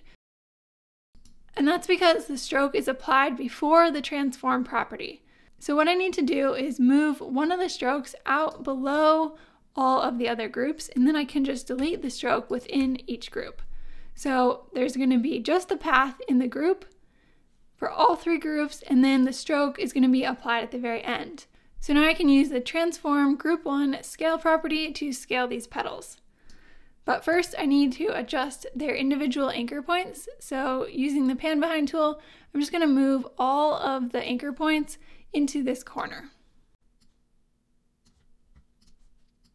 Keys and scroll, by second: 0.7 super+z, 11.8 BackSpace, 27.3 super+z.